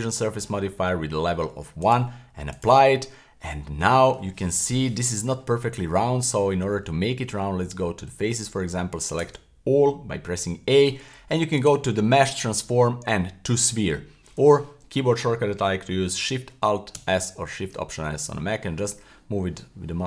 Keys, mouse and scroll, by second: 0.1 middle click, 1.8-2.6 drag, 3.3-3.6 scroll up 1, 3.6 middle click, 4.5 KP_1, 7.2 Tab, 9.2 a, 11.6-14.4 drag, 16.9 alt+shift+s.